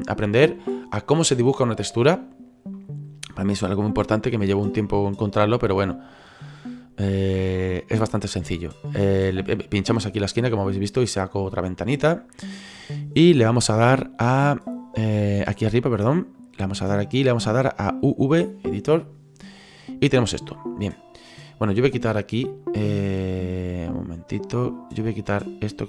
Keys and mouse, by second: 5.2 click, 13.4 click, 15.9 click, 18.9 click, 21.7 right click, 23.9 click, 25.3 right click.